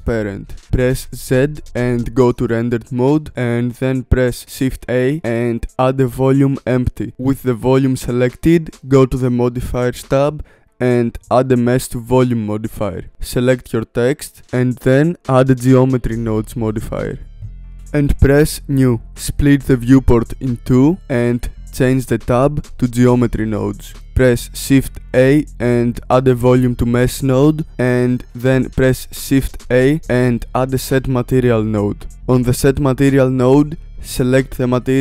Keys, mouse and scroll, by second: 0.6-1.6 shift+middle drag, 1.6 z, 5.9 shift+a, 11.3-12.5 drag, 17.6-21.5 drag, 21.5-22.6 shift+middle drag, 22.6-26.1 drag, 30.3 shift+a, 31.9-35.0 drag.